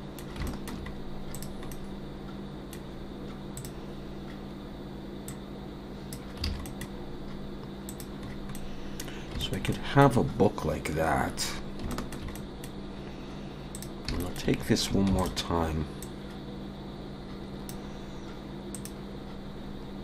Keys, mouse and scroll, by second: 0.5 shift+middle click, 0.9 scroll up 2, 1.3 click, 1.7 middle click, 3.6 click, 5.3 click, 6.4 alt+a, 6.6 middle click, 7.9 click, 8.3-8.6 scroll down 2, 8.5 middle click, 9.4 shift+middle click, 9.7 middle click, 11.0-11.3 scroll up 2, 11.4 scroll down 3, 11.9 shift+middle click, 12.3 middle click, 13.7 click, 14.2 shift+middle click, 15.2 shift+d, 16.0 click.